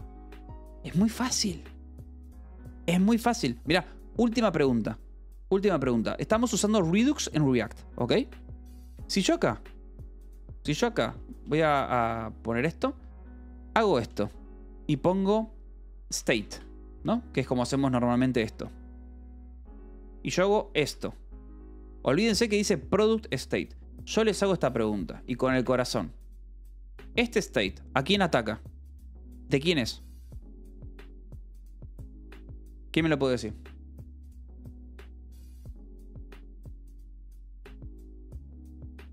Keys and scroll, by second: 0.0 Escape, 3.2 u, 4.1 j, 6.4 k, 7.1 j, 8.4-9.4 typing, 12.0 ctrl+g, 12.5 Escape, 13.0-17.6 typing, 18.5 Return, 20.4 ctrl+g, 20.8 Escape, 25.3 p, 26.3 f, 26.7 v, 27.3 e.